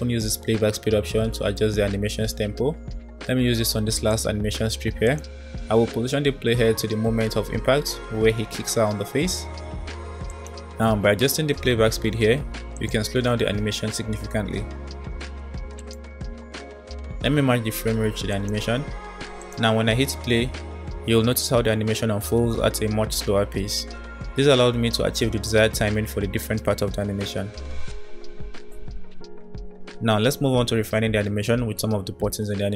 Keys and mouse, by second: 3.4-3.8 middle drag, 4.2 click, 5.1-6.5 drag, 7.3 space, 9.3 space, 10.3 click, 12.7-14.7 drag, 15.9 click, 16.2 space, 16.5 space, 18.4 click, 19.3 click, 19.5 space, 24.6 space, 26.5-28.9 drag, 31.8-32.7 middle drag.